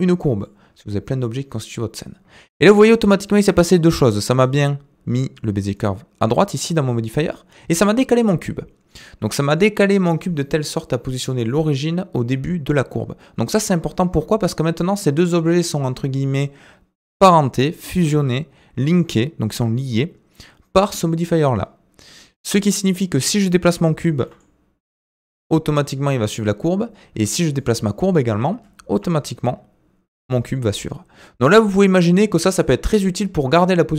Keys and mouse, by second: 8.9-9.7 middle drag, 24.2 g, 27.6 click, 27.8 middle drag, 28.9 g.